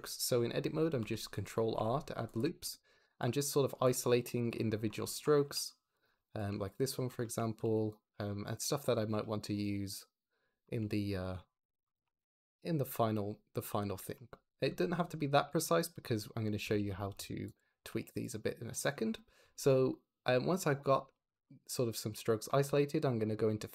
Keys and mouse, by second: 0.9 ctrl+r, 1.2 click, 2.1 shift+click, 2.5 shift+click, 2.8 ctrl+r, 3.0 click, 4.0 ctrl+r, 4.3 click, 5.4 ctrl+r, 5.8 click, 7.5 ctrl+r, 7.8 click, 9.5 ctrl+r, 9.8 click, 16.5 Tab, 16.7 click, 17.0 Tab, 17.4 click, 17.8 3, 18.0 click, 21.0 shift+click.